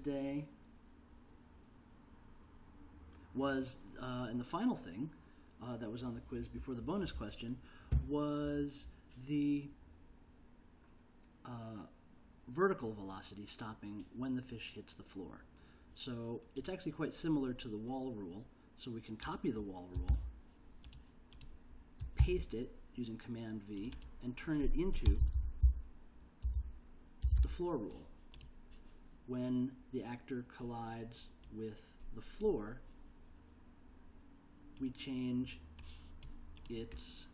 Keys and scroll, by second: 20.3 super+c, 22.4 super+v, 25.0-28.0 typing.